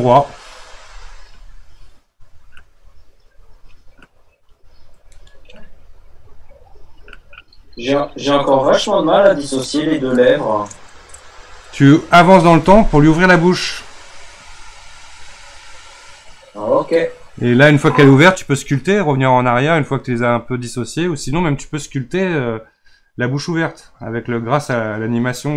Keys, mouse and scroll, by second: 5.2 right click, 7.6-16.1 drag, 21.7 click.